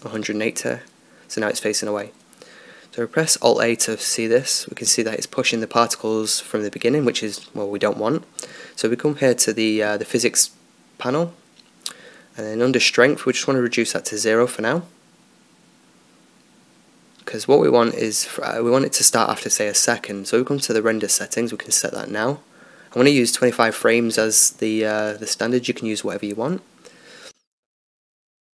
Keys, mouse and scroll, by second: 0.3 r, 0.4 r, 3.9 alt+a, 6.7-24.4 drag, 26.7-28.5 drag.